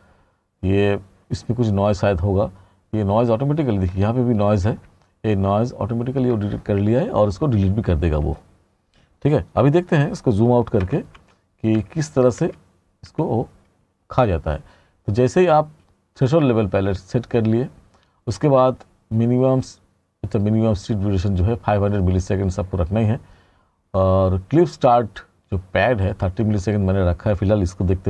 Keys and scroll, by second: 10.9 r.